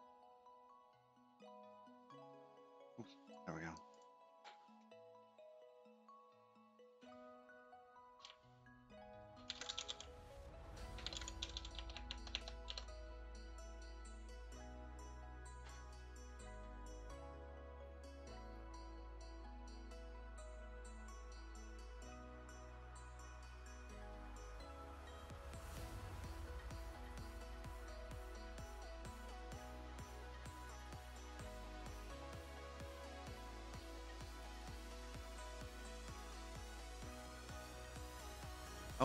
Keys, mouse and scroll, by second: 0.1-0.9 scroll up 1, 0.9-1.9 scroll up 2, 1.9 click, 3.3 click, 4.7 click, 6.8 click, 8.3-8.9 BackSpace, 9.7 Delete, 12.2 m, 12.6 BackSpace, 12.8 BackSpace, 15.2 click, 17.0-18.6 scroll down 17, 19.4-19.8 scroll down 3, 20.4-22.6 scroll down 11, 22.8 click, 24.3 click, 27.9 middle click, 28.9 scroll down 5, 31.7 click, 36.3 scroll up 7, 36.9-37.7 scroll up 9, 38.3-38.9 scroll up 6.